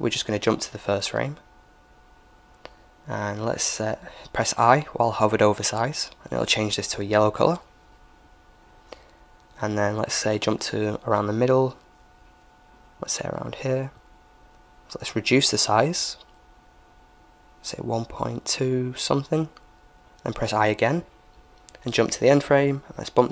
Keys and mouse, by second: 0.2-3.6 drag, 10.6-12.4 drag, 14.9-16.6 drag, 21.6-23.3 drag.